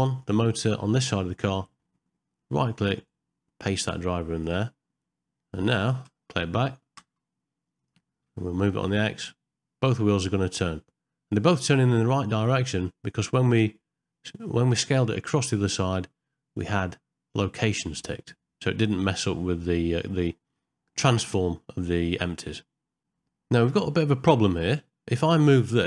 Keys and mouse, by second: 0.2 click, 0.8 middle click, 3.0-4.5 right drag, 6.1 space, 7.0 space, 7.8 click, 8.9 g, 16.6-19.8 drag.